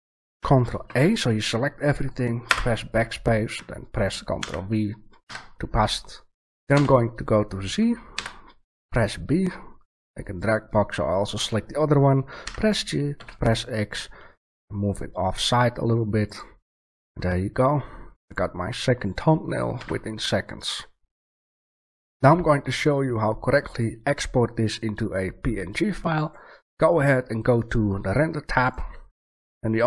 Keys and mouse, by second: 0.8 ctrl+a, 2.4 BackSpace, 4.3 ctrl+v, 5.2 Tab, 6.7 z, 8.1 b, 8.4 click, 12.4 g, 19.7 a, 28.6 click.